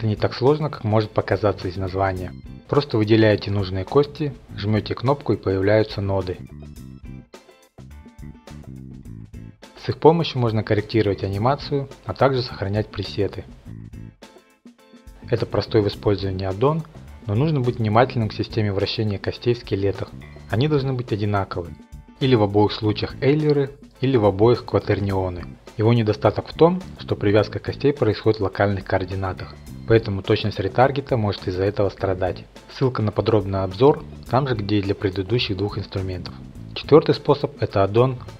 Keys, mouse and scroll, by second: 0.7 click, 1.2 ctrl+F9, 3.3-4.0 scroll up 6, 3.7 click, 4.2 shift+click, 5.6 click, 5.9 scroll up 3, 6.1-6.4 scroll down 2, 7.2 shift+click, 7.6 click, 8.3 shift+click, 8.6 click, 8.9 click, 8.9 scroll, 9.1 click, 9.4 click, 9.5 click, 9.7 click, 9.7 scroll, 9.8 click, 10.1 click, 10.4-11.1 scroll, 10.8 click, 11.7 click, 12.4 click, 13.0 click, 13.6 scroll, 13.9 click, 14.3-14.8 scroll, 14.8 click, 17.2 click, 18.1-18.5 scroll, 20.7 click, 21.3 click, 27.2 F8, 28.4 click, 28.8 click, 30.3 click, 30.7 click, 32.2 click, 36.4 click.